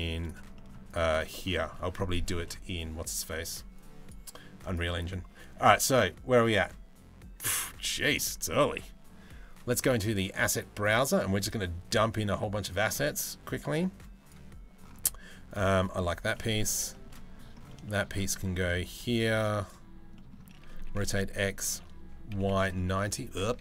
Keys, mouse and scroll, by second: 0.2 shift+middle drag, 0.5 drag, 0.8-1.2 middle drag, 1.9 middle click, 3.4 middle click, 15.4 middle click, 16.0 middle click, 16.8 middle click, 17.5 shift+middle click, 20.4 r, 23.3 ctrl+z.